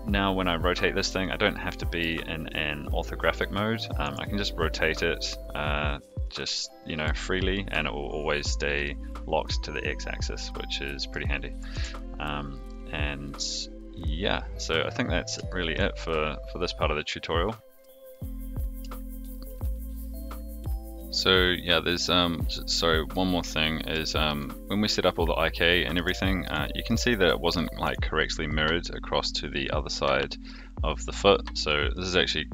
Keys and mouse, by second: 1.5-2.0 middle drag, 3.3-3.7 middle drag, 4.0 r, 6.3-7.0 middle drag, 7.5 middle drag, 8.8-11.1 middle drag, 11.7 alt+r, 12.6-14.5 middle drag, 15.4 shift+middle drag, 19.2 shift+click, 21.8-23.1 middle drag, 24.0 shift+middle drag, 25.0 click, 25.7 middle drag, 26.1 shift+middle drag, 26.6 middle drag, 27.5 shift+middle click, 28.4-30.5 middle drag, 31.6 middle drag.